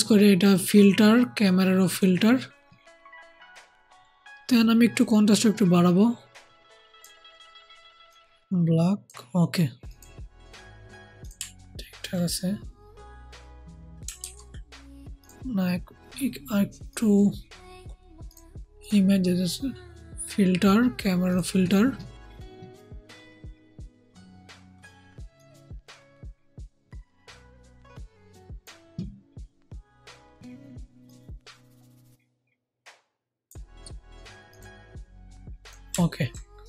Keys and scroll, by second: 14.1 ctrl+z.